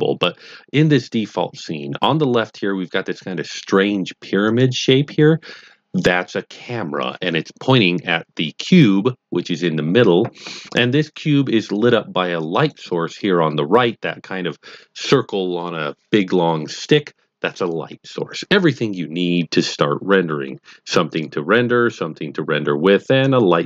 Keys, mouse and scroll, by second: 4.4 click, 9.5-11.9 drag, 12.5 click, 21.1 click.